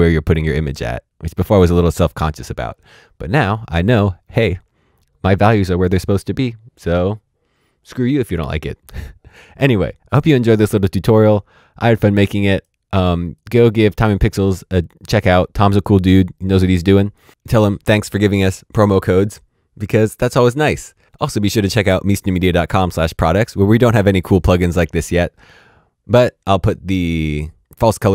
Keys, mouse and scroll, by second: 10.1 click.